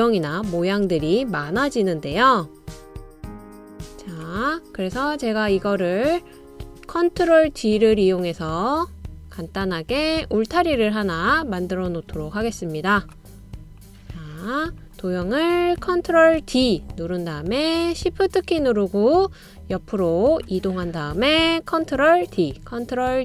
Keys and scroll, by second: 1.9 BackSpace, 15.7 ctrl+d, 17.1 super+d, 22.2 ctrl+d, 23.1 super+d.